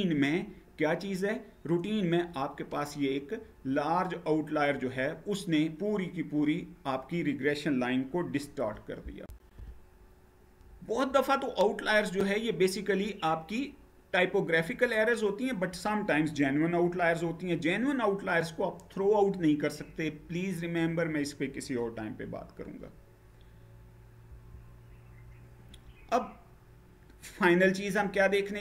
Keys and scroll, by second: 8.9 shift+F9, 11.9 shift+F9, 24.0 Down.